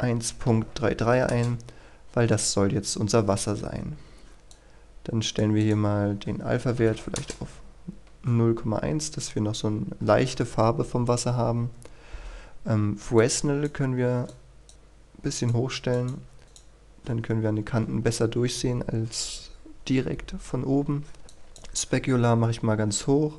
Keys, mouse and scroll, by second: 1.3 Return, 2.9-4.5 scroll up 1, 4.5 click, 6.9 KP_1, 7.1 Return, 8.9-9.7 scroll up 1, 10.2-12.2 scroll down 1, 12.2-13.1 scroll up 1, 13.1-23.3 drag.